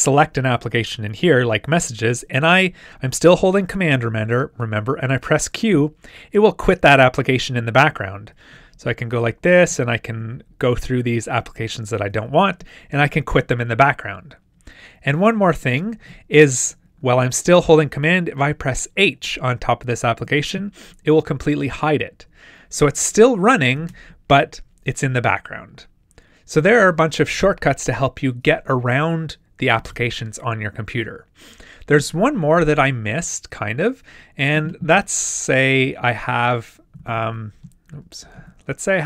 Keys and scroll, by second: 5.7 super+q, 8.7 shift+super+Tab, 10.4 super+Tab, 11.6 super+q, 12.1 shift+super+q, 15.6 shift+super+Tab, 20.1 super+h, 38.2 super+q.